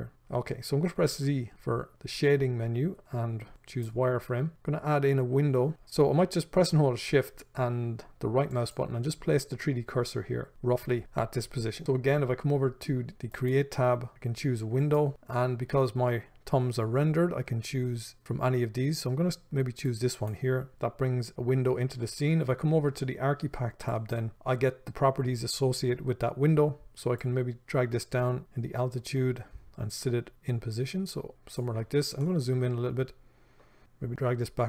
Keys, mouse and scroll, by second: 8.7-15.1 shift+right drag, 15.1-24.3 drag, 27.4-32.4 drag, 32.4-33.8 ctrl+middle drag, 33.8-34.6 drag.